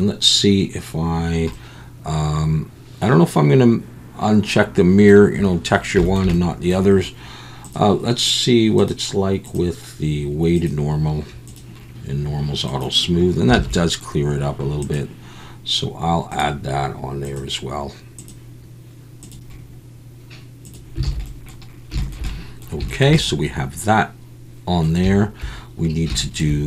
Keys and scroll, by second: 13.5 alt+a, 21.0 alt+a.